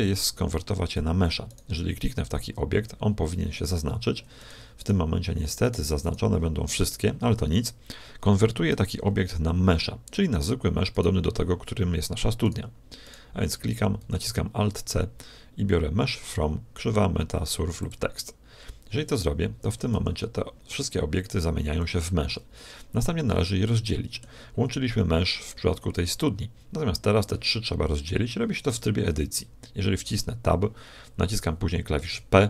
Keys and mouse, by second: 0.1-3.4 right drag, 2.7 z, 4.5-8.0 right drag, 10.9-14.5 right drag, 14.0 alt+c, 19.9 r, 23.3-25.3 middle drag, 28.7 Tab, 32.1 p.